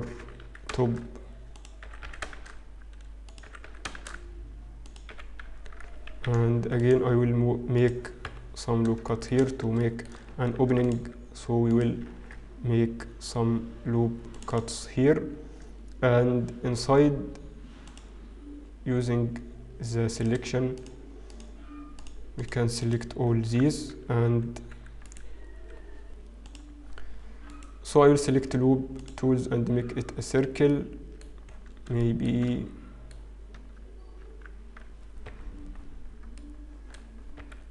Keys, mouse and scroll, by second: 0.7 e, 2.4 shift+e, 4.6 e, 5.2 f, 6.2 ctrl+r, 8.7 KP_1, 9.2 shift+middle click, 9.7-10.2 scroll up 3, 10.2 shift+middle click, 10.4-10.8 scroll up 1, 10.8 ctrl+r, 14.1 ctrl+r, 16.2-17.6 scroll down 3, 18.0 click, 20.2 click, 20.8 shift+click, 21.8 click, 22.0 shift+click, 24.0 shift+click, 24.3 w, 25.1 right click, 28.3 right click, 29.8-30.4 scroll up 2, 30.4-30.9 scroll down 2, 30.9 middle click, 32.2 shift+middle click, 32.2-32.6 scroll down 4, 32.8 middle click, 33.2 scroll up 1, 33.8 Tab, 33.8-35.8 scroll up 1, 35.8 Tab, 35.8-36.4 scroll down 2, 35.8 KP_7, 36.4 middle click, 36.4-37.7 scroll down 2.